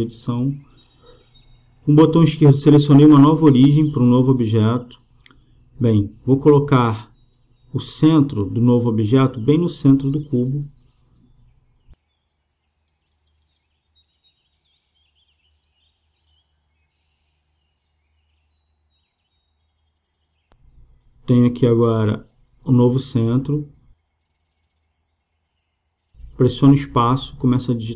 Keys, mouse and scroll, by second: 0.3 Tab, 4.1-5.4 drag, 5.4 KP_7, 7.1 KP_1, 8.5-10.5 middle drag, 10.5-12.3 drag, 15.6 click, 17.0 KP_3, 18.2 KP_1, 20.0 KP_0, 26.9 space.